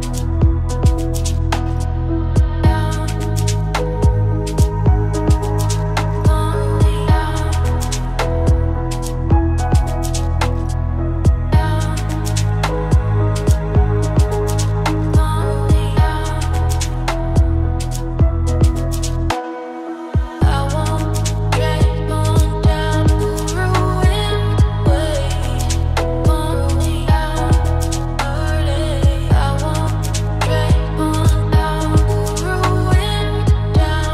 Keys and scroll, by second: 4.0 ctrl+alt+s, 12.2 ctrl+alt+s.